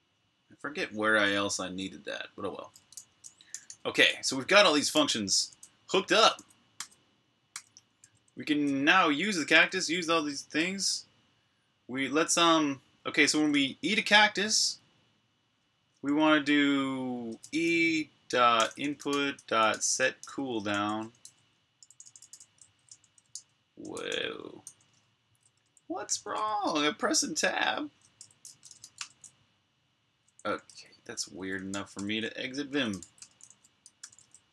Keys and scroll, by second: 3.1-4.8 typing, 5.9-10.0 typing, 13.1 typing, 13.3 Tab, 15.6-24.4 typing, 24.4 Tab, 25.4 BackSpace, 27.1 Tab, 28.0-29.1 typing, 30.4-34.5 typing.